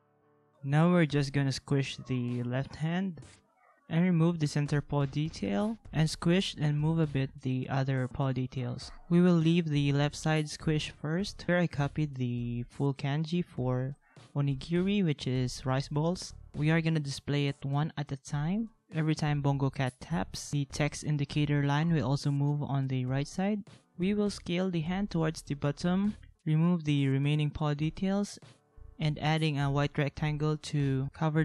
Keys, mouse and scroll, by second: 8.6 ctrl+-, 8.8 ctrl+v, 12.2 ctrl+x, 12.9 ctrl+z, 13.3 ctrl+x, 14.7 ctrl+c, 14.9 ctrl+v, 17.9 ctrl+x, 18.8-19.2 ctrl+z, 19.4 ctrl+z, 19.5 ctrl+z, 19.6-20.2 ctrl+z, 20.3 ctrl+z, 20.4 ctrl+z, 20.6 ctrl+z, 24.2 ctrl+=, 24.2 ctrl+=, 28.4 ctrl+-, 28.5 ctrl+-.